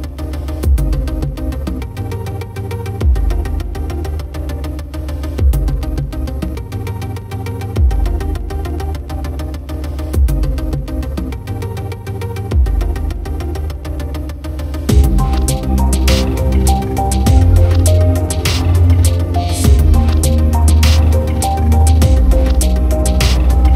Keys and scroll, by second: 9.0 ctrl+=, 9.4 ctrl+space, 10.9 alt+space, 21.4 ctrl+z.